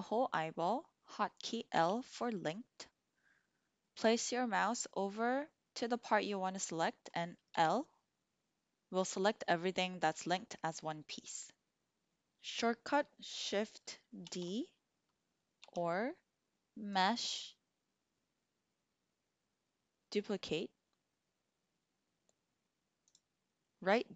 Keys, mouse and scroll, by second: 1.9 l, 7.5 l, 14.2 shift+d, 15.6 Escape, 16.9-23.3 drag.